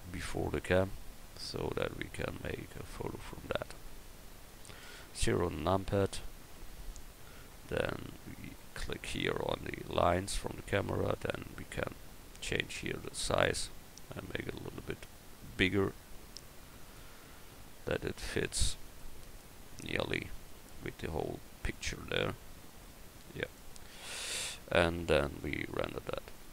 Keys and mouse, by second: 5.3 KP_0, 8.6 click, 20.4 g.